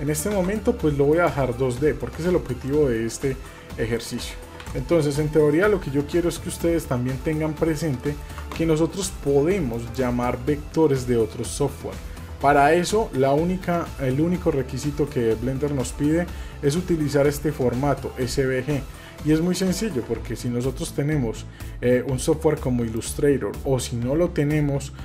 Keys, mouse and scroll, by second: 1.1 click, 1.8 middle click, 2.2-2.5 scroll up 2, 2.5 scroll down 1, 2.7 middle drag, 3.3 Tab, 3.7 scroll down 1, 3.9 middle drag, 4.6 Delete, 4.6 End, 5.3 scroll down 1, 5.5 middle click, 6.5 middle click, 7.3 middle click, 8.0-8.4 shift+middle drag, 9.7-19.0 drag.